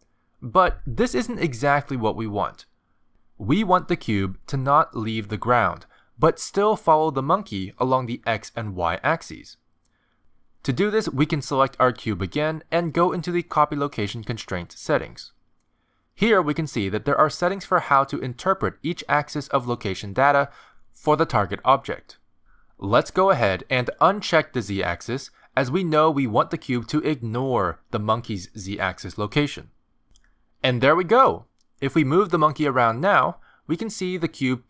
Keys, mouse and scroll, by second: 0.8 z, 1.9 g, 4.2 s, 5.1 r, 6.3 g, 7.8 click, 8.3 g, 10.1 click, 10.3 g, 11.9 click, 22.1 click, 23.3 click, 29.9 click, 31.9 click, 32.4 g.